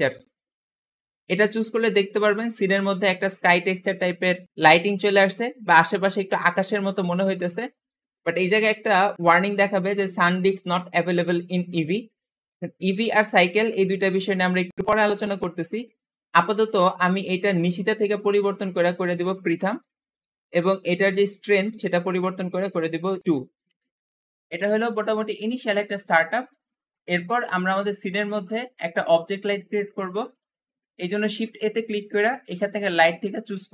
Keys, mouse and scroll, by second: 2.8-4.1 middle drag, 17.3-20.4 drag, 21.3-23.9 drag, 23.2-24.2 typing, 24.3-24.8 scroll down 2, 24.8-26.4 middle drag, 26.4-26.8 scroll up 1, 26.8 shift+middle click, 27.6-27.9 scroll up 1, 27.9-30.9 shift+middle drag, 30.9 shift+a, 31.1 shift+a.